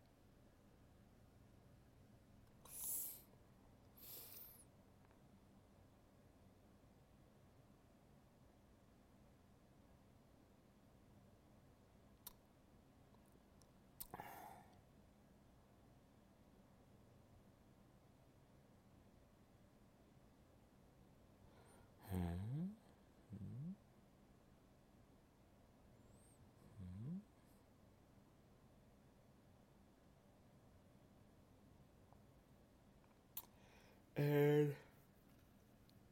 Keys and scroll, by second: 0.9 alt+space, 20.2 alt+space, 28.2 alt+space, 33.9 alt+space.